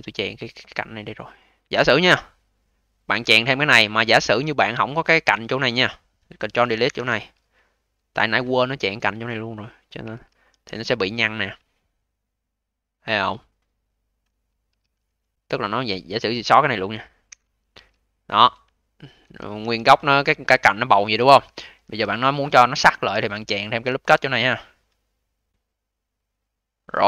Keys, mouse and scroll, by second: 1.0 click, 1.3 click, 2.6 click, 2.8 click, 4.0 click, 4.2 click, 6.7 ctrl+Delete, 10.0 q, 10.4 v, 10.7-11.2 scroll up 3, 11.2-11.6 scroll up 5, 11.6-14.0 alt+drag, 14.0-14.6 scroll down 1, 14.6 q, 14.9 v, 15.4-16.3 scroll down 1, 16.3 click, 16.5 click, 17.2 ctrl+Delete, 17.7 q, 18.2-18.6 scroll down 1, 18.6 alt+click, 19.5 v, 19.9-20.4 scroll down 2, 20.4-21.0 alt+middle drag, 21.0-21.3 scroll up 1, 21.3 q, 21.7 v, 22.3-23.0 scroll up 4, 23.0 a.